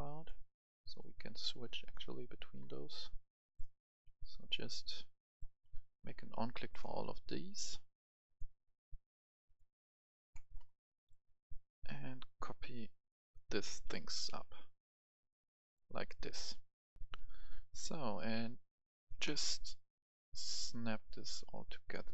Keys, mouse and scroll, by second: 0.2 click, 2.6 scroll down 1, 3.5 click, 5.6-6.2 scroll down 1, 6.7 click, 8.7 scroll down 1, 9.5 click, 10.7 scroll down 1, 10.9 right click, 11.8-13.4 drag, 14.1 ctrl+c, 14.1 click, 14.8 v, 15.4 click, 17.0 F10, 17.5-18.1 scroll up 1, 18.1 click, 19.2 right click, 19.9-22.1 drag.